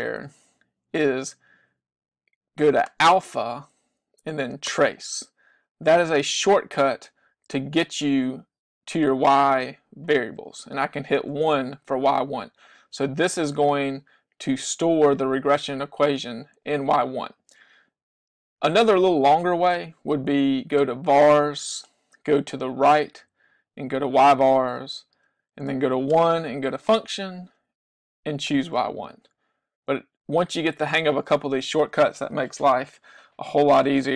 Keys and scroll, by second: 11.3 Return, 23.0 Right, 26.2 Return, 28.6 Return.